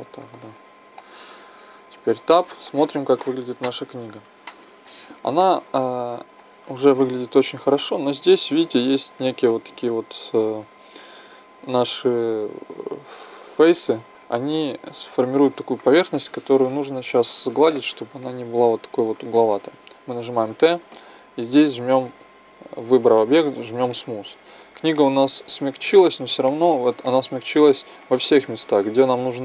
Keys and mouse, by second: 0.3-2.1 middle drag, 2.1 Tab, 7.0-7.8 middle drag, 9.1-14.1 middle drag, 14.1 ctrl+Tab, 17.3 Tab, 20.2 t.